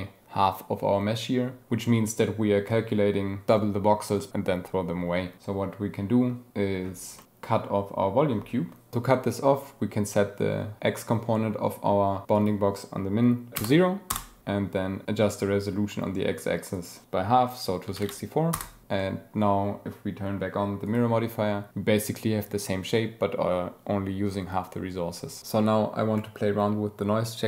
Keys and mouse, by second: 7.2-14.2 drag, 16.7-18.6 drag, 19.0 click, 20.9 click.